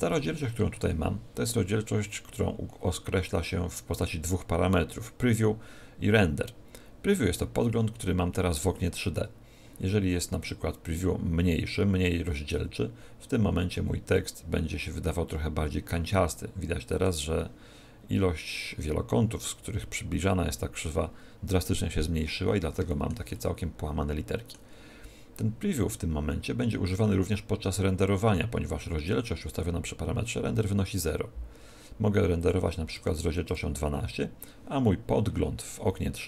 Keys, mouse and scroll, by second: 7.8 scroll up 4, 8.6 scroll down 4, 10.4 click, 16.8 click, 22.2-22.8 scroll up 3, 22.8 shift+middle click, 22.8 scroll up 2, 23.3 middle click.